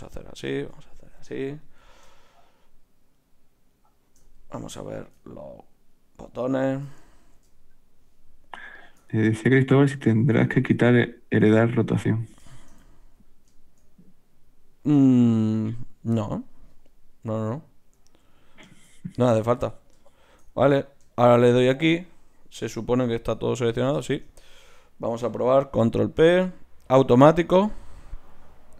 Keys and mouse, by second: 4.4 z, 10.3-14.8 right drag, 11.6 z, 14.8-20.1 middle drag, 20.1-22.6 right drag, 22.6 middle click, 22.6 g, 24.1-25.6 middle drag, 25.6 ctrl+p.